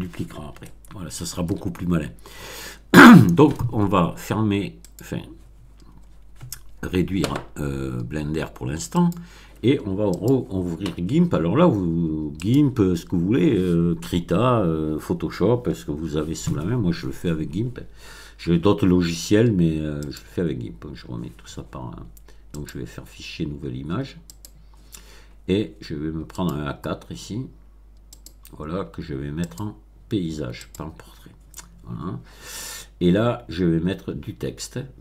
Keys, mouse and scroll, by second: 0.5-1.6 shift+middle drag, 4.8 click, 9.0 click, 10.1 click, 12.4 click, 20.0 click, 22.5 click, 24.3 click, 26.3 click, 28.1 click, 29.4 click, 30.5 click.